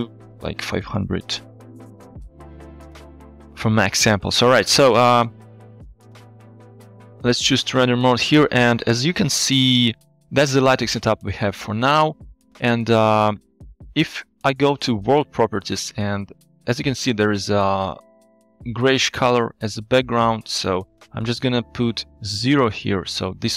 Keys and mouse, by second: 0.9 KP_0, 6.5 z, 12.6-13.2 middle drag, 13.2 click, 15.3 click, 21.1-22.9 drag.